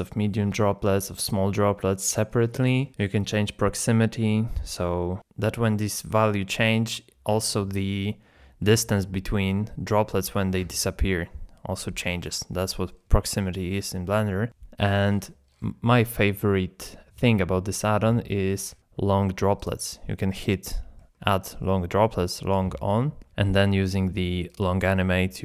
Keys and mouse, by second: 12.5-12.8 middle drag, 13.2 middle click, 13.9-14.3 middle drag, 14.7 middle click, 19.6-20.1 drag, 20.2-20.6 middle drag, 20.9 shift+middle drag, 24.5-25.4 drag.